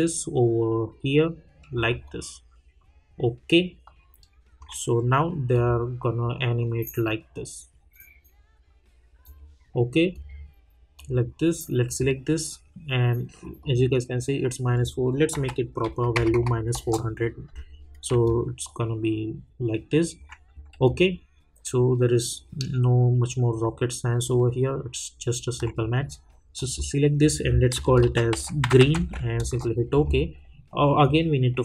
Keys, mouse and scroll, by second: 2.0-5.5 alt+drag, 9.2 click, 15.3 -, 16.7 Return, 18.2-20.8 alt+drag, 20.8-26.5 alt+drag, 28.0-29.0 typing, 29.4 Return, 31.0 click.